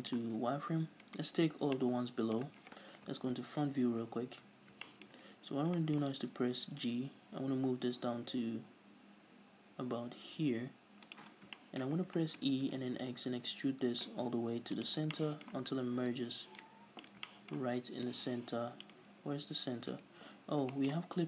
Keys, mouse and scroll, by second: 1.1 alt+right click, 1.7 scroll down 1, 1.8-4.1 middle drag, 4.0 KP_1, 4.6-5.8 scroll up 4, 4.9 shift+middle click, 5.3-6.9 middle drag, 6.9 g, 11.3 shift+click, 11.4 scroll down 2, 11.6-16.2 shift+middle drag, 12.1 scroll down 2, 12.6 e, 14.9 click, 15.0 scroll down 2, 16.2-17.3 drag, 17.3 shift+middle click, 18.1-20.8 drag, 19.3-19.8 scroll down 2, 19.8-20.5 scroll up 3, 20.1 ctrl+z, 20.8 shift+middle click.